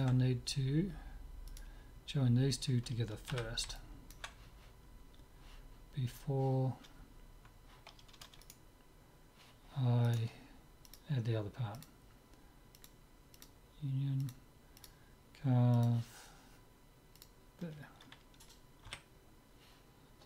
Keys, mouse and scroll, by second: 1.0 middle click, 1.5-3.5 right drag, 3.5 z, 3.8-5.8 middle drag, 8.5-11.9 right drag, 10.9-12.6 drag, 12.9-17.5 drag, 18.9 z.